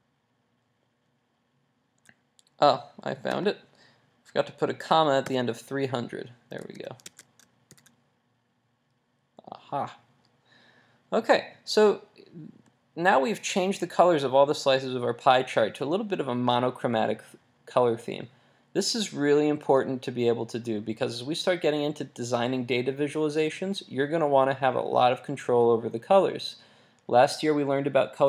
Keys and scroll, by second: 6.6 super+s, 7.7 super+r, 10.7 super+r.